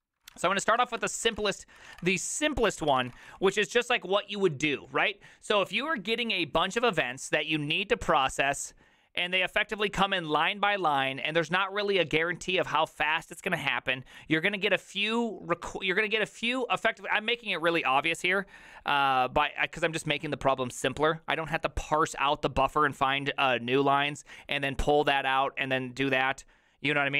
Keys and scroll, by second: 0.2-2.0 typing, 1.4 Return, 1.8 ctrl+c, 2.0 Return, 2.1 ctrl+u, 2.3 ctrl+u, 2.6 ctrl+c, 2.9 ctrl+c, 3.0 ctrl+:, 3.0-3.8 typing.